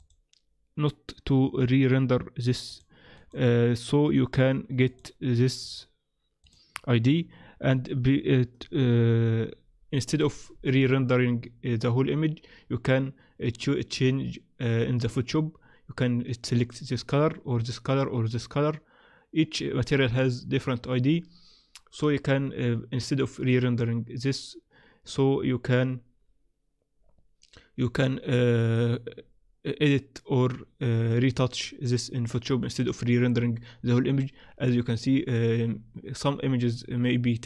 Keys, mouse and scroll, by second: 0.0 click, 5.6 click.